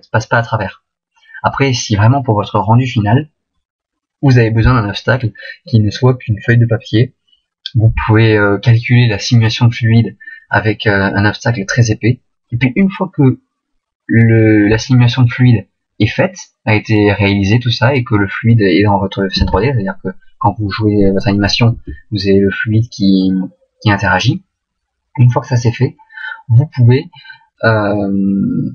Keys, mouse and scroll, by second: 19.4 alt+a, 21.7 Escape.